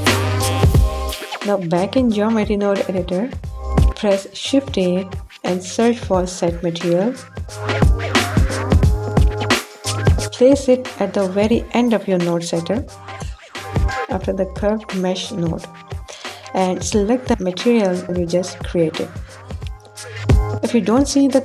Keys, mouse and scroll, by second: 5.3 shift+a, 11.3 click, 12.3-14.7 drag, 19.2 click.